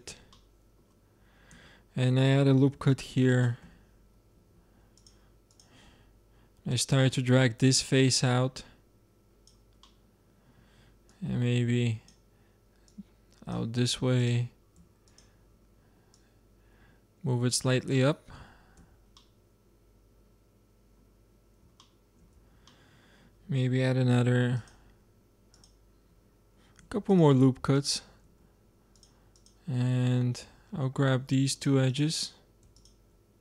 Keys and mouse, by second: 1.5 Tab, 2.7 ctrl+r, 4.3 ctrl+Tab, 6.0 click, 7.7 click, 9.7-11.5 middle drag, 11.5-17.9 drag, 17.9 middle click, 18.7 Tab, 21.1-21.7 middle drag, 22.3 Tab, 24.1 ctrl+r, 24.5 click, 26.7 ctrl+r, 28.2 ctrl+Tab, 29.7 click, 29.9 z, 30.2 click, 31.0 ctrl+Tab.